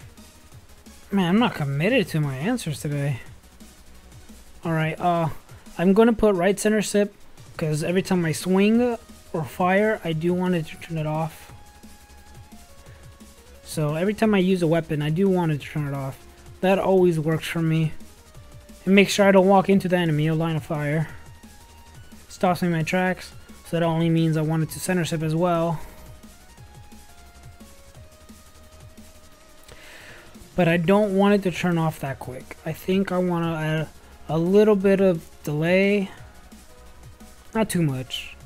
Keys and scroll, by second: 34.3 space, 35.7-37.0 typing.